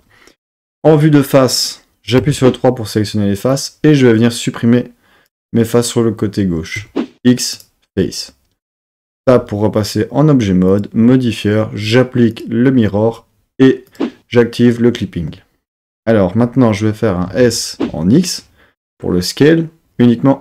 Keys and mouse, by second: 0.7 KP_1, 2.2 3, 3.5-5.5 drag, 6.8 x, 9.1 Tab, 10.7-13.7 drag, 13.9 click, 17.3 s, 17.8 x.